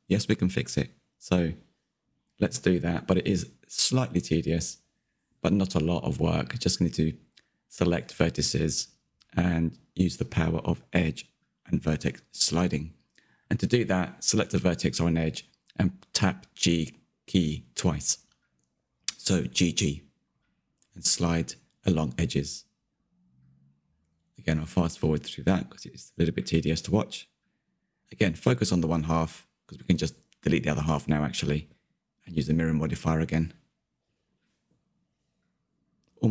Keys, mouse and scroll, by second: 1.0 middle click, 1.9-3.3 scroll up 2, 3.3 click, 4.5-5.6 middle drag, 5.6 g, 9.9 g, 13.9 click, 14.5 g, 19.6-22.6 middle drag, 22.6 scroll down 2, 22.8 shift+middle click, 23.2 scroll up 2, 23.3 shift+middle click, 23.6 click, 23.7 middle click, 24.5 g, 25.1 g, 26.3 g, 27.0 g, 27.9 Tab, 28.0 scroll down 1, 28.1 middle click, 28.5 Tab, 28.6-29.2 scroll up 4, 28.7 shift+middle click, 29.2 click, 29.7 g, 30.2 g, 31.1 click, 31.1 g, 31.6 g, 32.4 middle click, 32.8 click, 33.0 g, 33.9 click, 34.0 g, 34.8 click, 34.9 g, 36.0 scroll down 2, 36.2 shift+middle click.